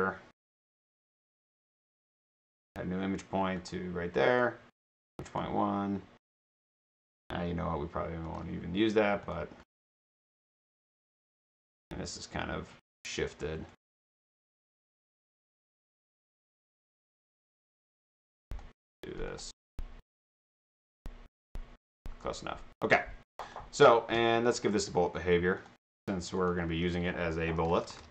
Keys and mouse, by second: 1.8 click, 2.6 click, 3.6 click, 5.3 click, 8.3 drag, 9.2 click, 10.5 click, 13.7 right click, 14.9 click, 16.0-17.0 drag, 18.5 click, 19.3 click, 20.8 click, 23.5 click, 24.2 click, 25.6 click, 26.4 click, 27.4-28.1 typing.